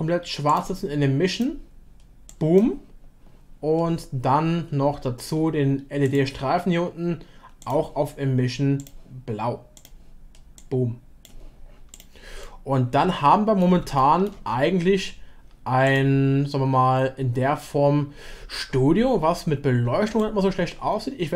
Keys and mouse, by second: 1.3 click, 6.0 click, 7.7-8.8 drag, 12.4-13.6 middle drag, 13.9 shift+middle click, 15.9-17.8 drag, 20.0-21.3 drag.